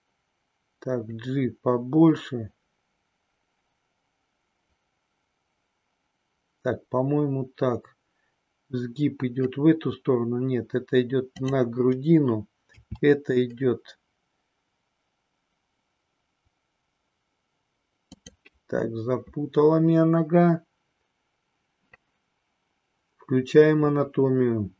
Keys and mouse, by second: 12.7 e, 18.0 click.